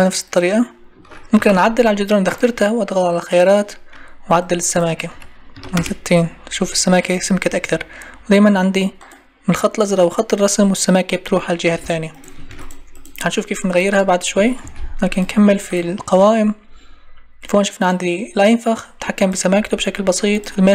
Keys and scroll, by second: 1.4 Delete, 5.7 Return, 12.5 ctrl+e, 14.6 Escape.